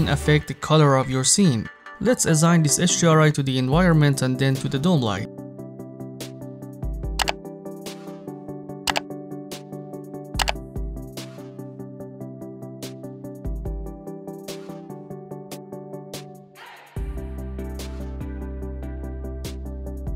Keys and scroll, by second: 0.0 8.